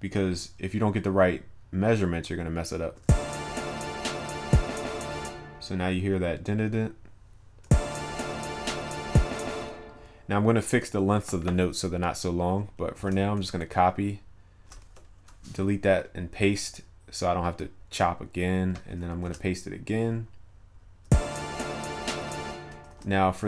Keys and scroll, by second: 13.0 ctrl+c, 15.7 ctrl+v, 22.9 ctrl+a.